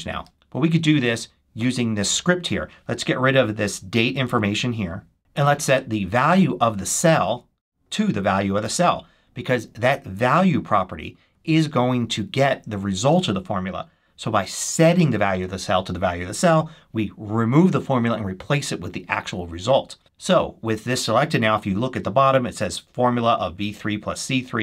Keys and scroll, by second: 4.1 super+x, 7.2 super+c, 8.6 super+v, 20.0 super+s.